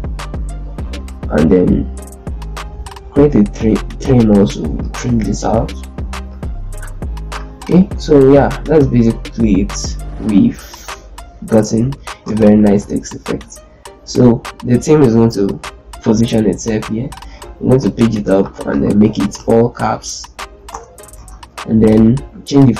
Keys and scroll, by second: 7.7 Delete, 8.2 z, 12.1 ctrl+space, 17.5 shift+Page_Up, 18.6 ctrl+a, 19.1 shift+F3, 19.4 u, 20.4 Return, 20.9 ctrl+space.